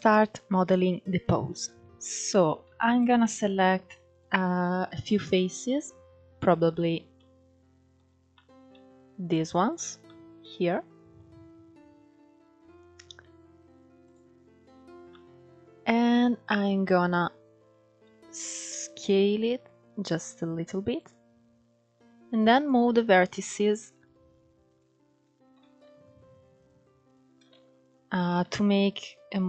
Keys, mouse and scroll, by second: 0.3-1.3 scroll up 1, 1.3 Tab, 2.3 shift+middle click, 2.6-3.3 scroll up 2, 3.3 ctrl+3, 3.8 click, 4.6 shift+click, 6.0 KP_Decimal, 6.6 scroll down 6, 6.8 middle click, 7.7-8.0 scroll up 1, 8.0 middle click, 8.9 shift+click, 9.3 shift+click, 9.6 scroll down 1, 9.7-11.6 middle drag, 11.6 KP_1, 13.7 click, 14.3-14.8 scroll up 2, 14.8-15.9 middle drag, 15.9-16.3 scroll up 1, 16.3-18.4 shift+middle drag, 18.4 s, 22.2 click, 23.3 ctrl+1, 24.4 click, 25.2 shift+v, 26.7 click, 27.2 shift+v, 27.8 click, 28.1 shift+v, 29.1 click.